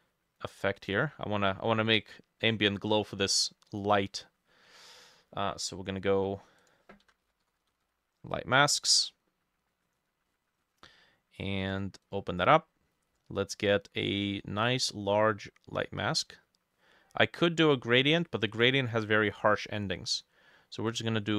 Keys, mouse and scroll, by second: 1.5 scroll down 2, 1.8 middle click, 7.0-8.4 typing, 10.3-10.8 scroll down 6, 10.8 scroll up 1, 10.9-11.2 scroll down 1, 12.1 double click, 12.4-13.2 scroll down 2.